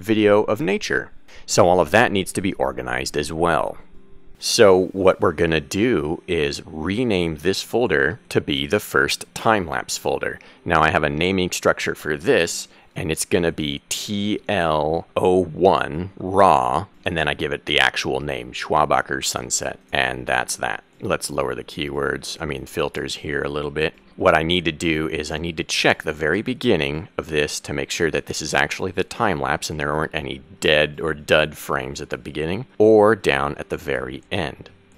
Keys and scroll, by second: 14.0 t, 16.5 w, 17.7 space, 17.8 -, 19.8 BackSpace, 27.4 Right, 31.0 Left.